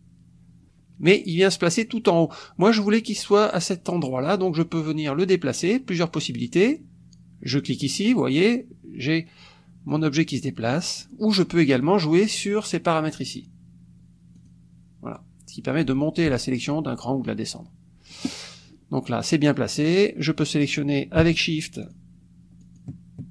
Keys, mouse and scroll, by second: 7.6 click, 9.9 click, 13.3 click, 14.3 click, 21.8 shift+click, 22.6 shift+click.